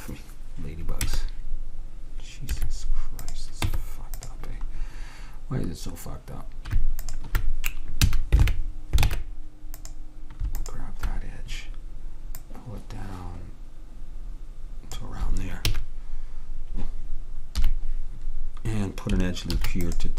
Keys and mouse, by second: 1.2 Tab, 3.4-5.1 drag, 3.7 Tab, 7.2-8.9 drag, 8.1 a, 9.1 ctrl+Tab, 10.7-14.3 drag, 15.8 q, 17.7 KP_3, 19.6 ctrl+r.